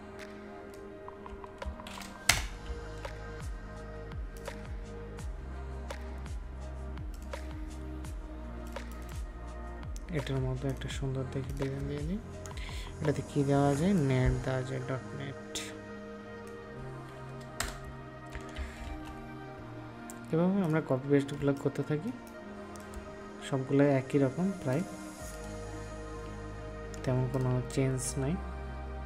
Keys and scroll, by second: 2.2 ctrl+Return, 2.6 ctrl+s, 18.5 ctrl+s, 21.3 ctrl+space.